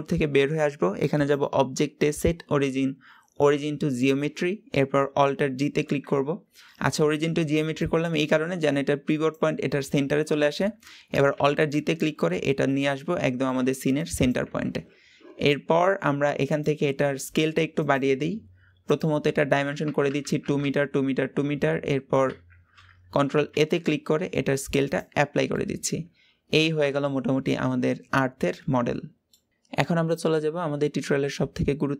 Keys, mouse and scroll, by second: 1.1-4.1 drag, 11.7-12.1 scroll down 4, 12.1-14.7 middle drag, 14.7-16.4 scroll up 2, 16.4-17.9 drag, 18.8-22.0 drag, 22.5-23.5 scroll down 2, 23.5 ctrl+a, 25.5-28.5 middle drag.